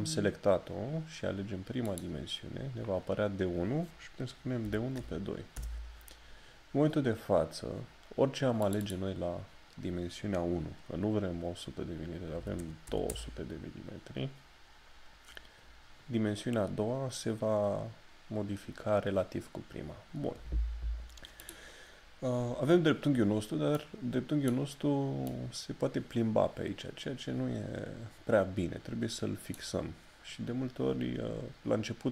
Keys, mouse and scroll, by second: 1.9 click, 5.5 Return, 8.6 click, 31.0 click.